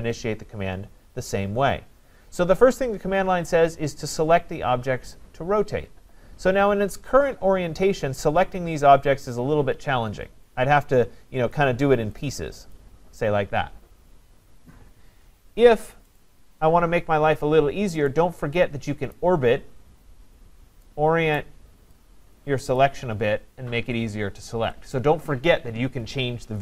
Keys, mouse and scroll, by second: 11.5 click, 12.7 click, 15.6 Escape, 16.2 right click, 19.1 right click, 19.4 scroll up 2, 19.8-20.6 scroll down 2, 20.6 scroll up 1, 20.6 scroll, 21.4 right click, 22.8 click.